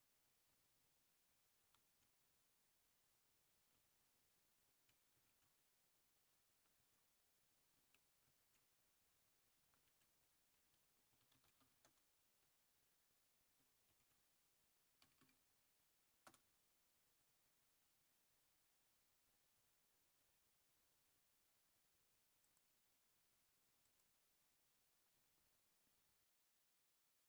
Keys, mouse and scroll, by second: 2.0 super+w, 4.5 super+8, 5.8 super+w, 7.6 super+9, 10.1 super+w, 12.1 super+3, 13.5 super+w, 15.0 super+2, 16.6 super+w, 18.1 super+1, 19.2-20.4 typing, 22.2 super+x, 23.4 Down, 23.6 Down, 24.6 Return.